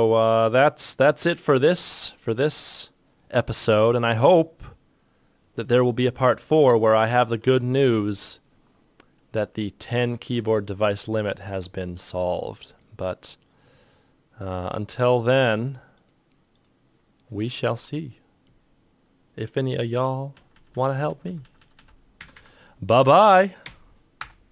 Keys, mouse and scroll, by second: 10.5 ctrl+Tab.